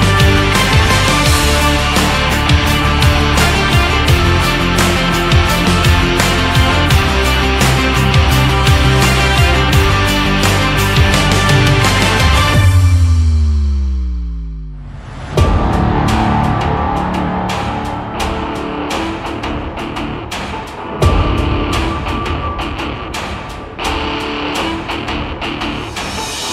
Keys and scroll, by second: 21.4 Left.